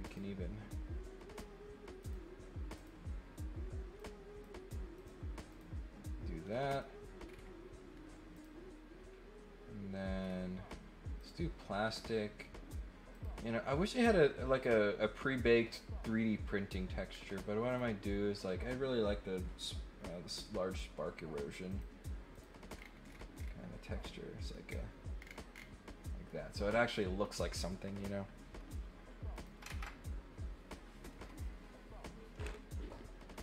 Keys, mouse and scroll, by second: 0.0 click, 1.9 click, 2.7 click, 3.9 click, 4.9 click, 5.5 click, 6.4 middle click, 7.2 scroll up 2, 8.3 click, 10.2 scroll up 2, 11.1 click, 13.1 click, 17.1 middle click, 17.1 scroll down 2, 17.6 click, 20.2 click, 21.6 click, 22.3 click, 22.7 scroll down 4, 23.0-23.5 scroll up 3, 23.5-24.5 middle drag, 24.9-25.6 scroll down 3, 25.8 middle click, 27.0 middle click, 29.3 click.